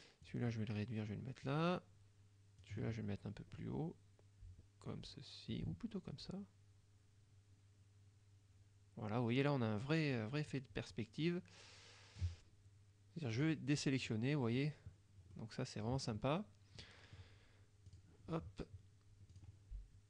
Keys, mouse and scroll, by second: 0.3-1.8 drag, 2.7-12.4 drag, 13.4 click, 14.1 click, 15.4 middle click, 16.9 middle click, 17.9 click, 19.4 click.